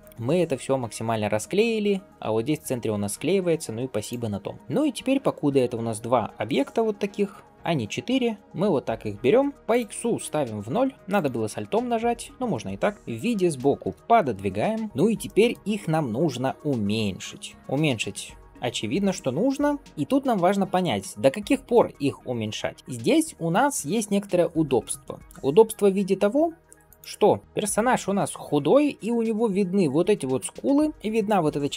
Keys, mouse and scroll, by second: 2.0-2.6 scroll up 1, 3.4-3.9 scroll down 1, 3.9 click, 4.6 scroll up 1, 5.4 shift+click, 7.0 click, 7.4 click, 8.3 g, 8.4 click, 8.5 shift+click, 9.4 scroll down 1, 9.5 n, 11.0 click, 12.0 click, 12.9 KP_3, 13.4 shift+middle click, 14.6 g, 15.1 shift+middle drag.